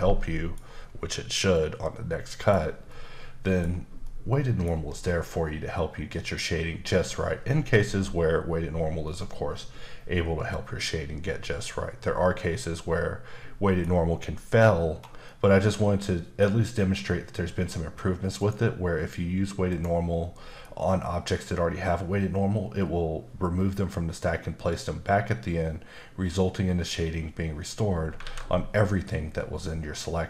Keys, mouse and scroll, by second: 1.5 middle click, 2.9 middle click, 4.0 middle click, 12.6 middle click, 14.4-15.2 scroll up 1, 15.2 middle click, 16.9 middle click, 18.3 click, 19.7 click, 28.2 alt+a.